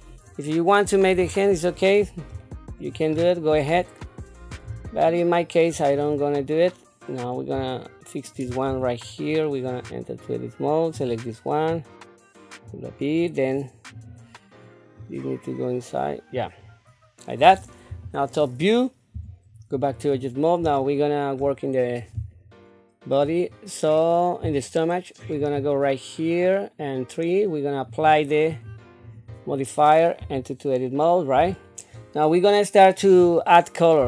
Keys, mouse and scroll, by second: 1.1 KP_7, 2.4 shift+middle click, 3.1 scroll up 3, 3.7 middle click, 4.9 shift+middle click, 5.9 click, 6.6 middle click, 7.7 shift+middle click, 8.6 Tab, 9.6 click, 10.9 click, 11.9 click, 13.9 click, 15.0-16.3 drag, 17.9 KP_7, 19.1 Tab, 19.7 click, 20.8 shift+middle click, 25.2 click, 27.9 click, 30.2 Tab, 31.4 Tab, 33.1-33.9 scroll down 2.